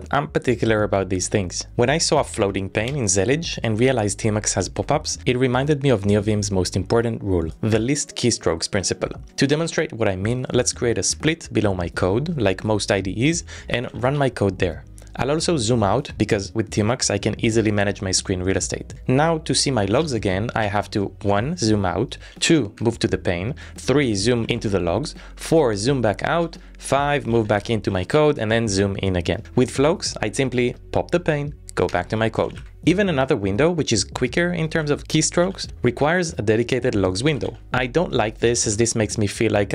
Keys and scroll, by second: 9.2 j, 9.6 Up, 11.4 Return, 13.6 ctrl+a, 13.7 k, 14.0 ctrl+a, 14.2 z, 20.0 ctrl+a, 20.6 z, 22.8 j, 24.1 ctrl+a, 24.4 z, 26.4 ctrl+a, 26.6-28.2 typing, 30.8 p, 31.8 Up, 32.1 Return, 32.8 p, 33.8 z, 35.4 ctrl+a, 35.6 ctrl+a, 37.3 ctrl+a, 38.6 ctrl+a, 38.9 p.